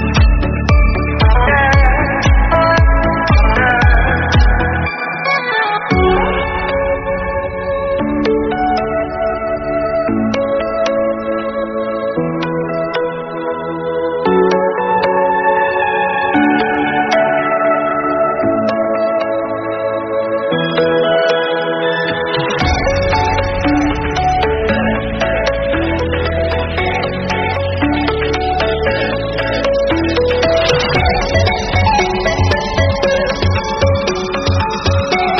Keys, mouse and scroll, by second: 1.9 shift+middle click, 2.7 click, 3.6 2, 3.8 click, 4.1 shift+click, 4.6 ctrl+b, 7.1-8.3 drag, 8.3 shift+middle click, 8.7 3, 9.2 click, 9.5 middle click, 9.6 i, 10.5 e, 11.5 s, 12.1 Tab, 12.5 scroll down 3, 12.7-15.0 middle drag, 15.4 click, 15.8 drag, 16.2 click, 19.0-19.4 scroll down 2, 19.4 click, 19.7-20.1 scroll up 2, 20.1 Tab, 20.7 click, 21.1 shift+middle click, 21.8 shift+click, 22.3 KP_Add, 22.5 middle click, 23.0-23.4 scroll up 5, 23.4 click, 23.8 click, 24.6 Tab, 25.1 scroll down 1, 25.4 click, 27.0-27.6 scroll down 2, 27.6-29.9 drag, 29.9 scroll down 1, 30.0 middle click, 30.2 scroll up 2, 30.4-30.9 middle drag, 30.9 scroll down 2, 31.0-31.7 middle drag, 31.7 click, 32.4 click, 33.0 h, 33.3 shift+a, 34.6 Tab, 34.7 KP_1.